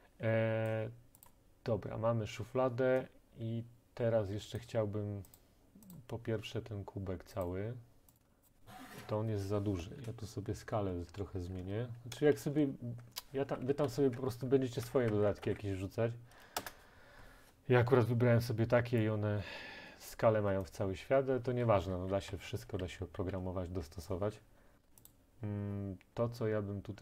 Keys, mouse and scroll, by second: 0.0-0.1 typing, 0.7 right click, 1.2 typing, 1.3 right click, 3.2-4.9 typing, 4.6 right click, 5.4 right click, 6.0 right click, 7.5 click, 8.2 click, 8.5 click, 9.8 Right, 10.0 Left, 10.5 Tab, 10.6-11.1 Left, 11.2 Right, 11.6 Right, 11.6 Right, 12.4-12.9 End, 13.7 ctrl+a, 13.9 ctrl+c, 14.2 Tab, 14.9 ctrl+v, 15.1 Tab, 15.5 ctrl+v, 16.6 Return, 20.1 click, 20.7-23.4 typing, 24.1 right click, 25.2 right click.